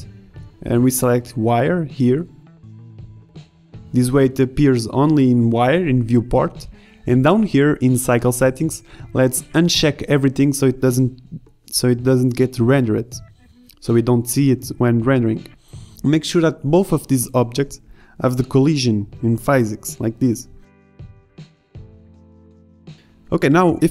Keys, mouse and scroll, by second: 0.8 drag, 1.1 drag, 9.1 middle click, 9.3-13.1 drag, 15.2-15.6 middle drag, 15.7 middle click.